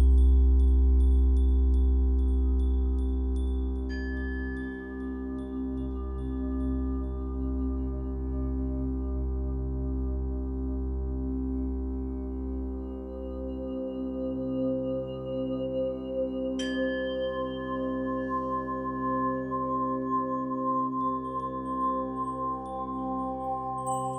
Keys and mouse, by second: 0.5-2.4 drag, 3.3 click, 5.1 click, 6.6 click, 6.9 click, 7.5 click, 9.3-10.4 drag, 12.1 click, 12.3 click, 13.3 click, 13.6 drag, 14.4 ctrl+s, 15.4 space, 17.6 click, 19.2 -, 20.1-20.8 drag, 22.3 click, 23.9 click.